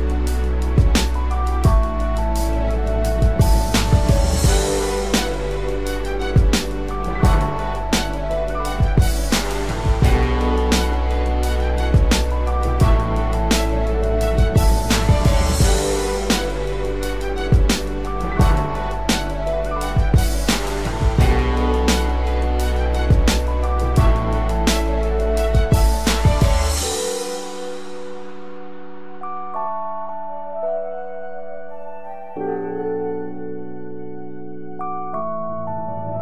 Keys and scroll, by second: 1.3 ctrl+z, 2.3 ctrl+alt+z, 29.4 ctrl+0, 30.3 ctrl+=, 32.0 ctrl+0, 35.0 ctrl+0.